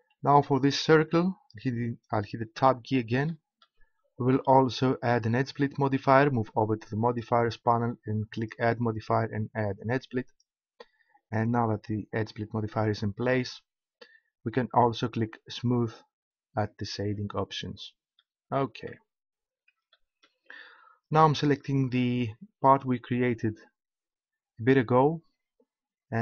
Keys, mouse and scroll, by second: 2.6 Tab, 5.9 3, 7.0-10.0 drag, 13.7-15.8 middle drag, 15.8-18.1 drag, 22.6-25.7 right drag.